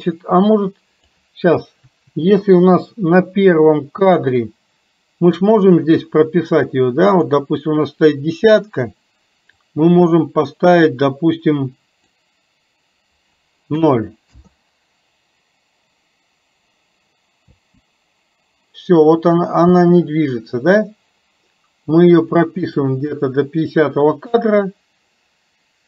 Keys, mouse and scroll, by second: 0.0-1.2 drag, 4.2 click, 7.1-14.6 drag, 22.8 click.